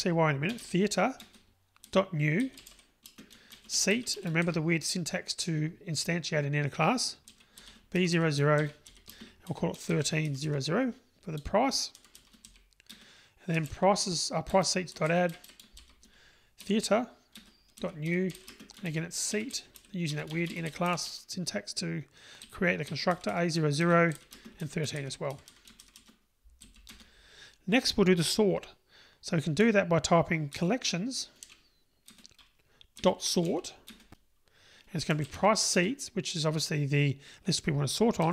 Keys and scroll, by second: 1.5 Return, 14.6 Return, 17.9 Return, 32.1 Return.